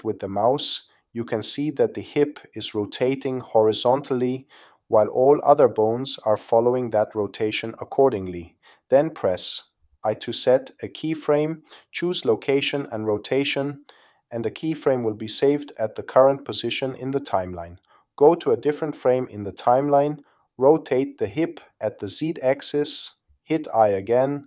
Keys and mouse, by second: 0.4 click, 1.9 click, 2.4-3.8 drag, 8.3 i, 14.1-17.8 drag, 20.6-22.2 drag, 23.8 i.